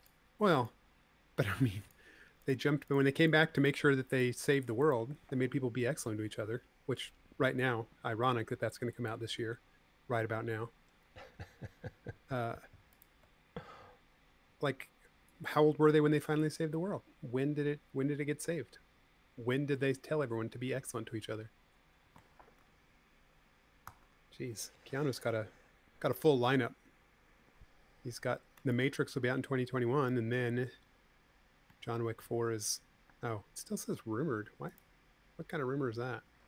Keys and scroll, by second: 24.4 super+c, 26.9 v, 33.7 space.